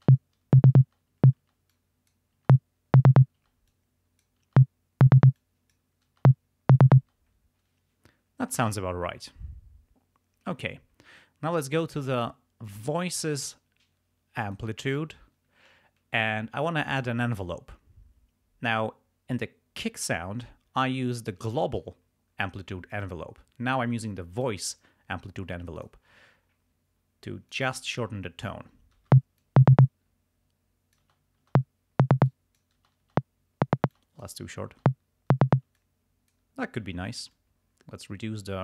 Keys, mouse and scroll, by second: 0.0 space, 0.8 space, 1.7 click, 2.4 space, 3.4 space, 3.7 click, 4.5 space, 5.3 space, 5.3 click, 6.2 space, 7.0 space, 12.8 click, 14.4 click, 21.4 click, 22.9 click, 24.4 click, 25.8 click, 27.5 click, 28.0 click, 29.0 space, 29.5-31.2 drag, 31.0 space, 32.3 click, 32.8 space, 33.9 click, 33.9 space, 34.8 space, 35.7 space, 35.7 click, 37.3-38.6 drag.